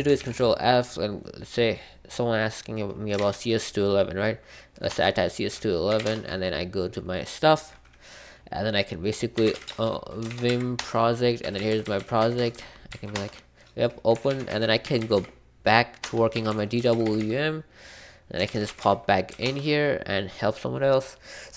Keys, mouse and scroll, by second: 0.1 ctrl+f, 4.6-6.3 typing, 9.2-19.8 typing, 10.7 Return, 16.0 Return.